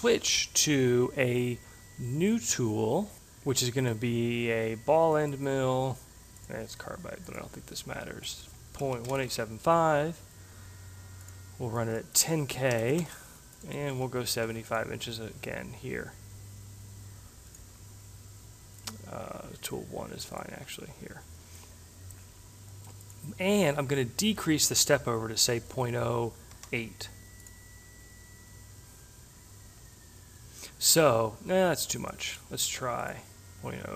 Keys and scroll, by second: 8.4 Delete, 8.9-9.9 typing, 12.5-14.9 typing, 25.3 0, 26.6 8.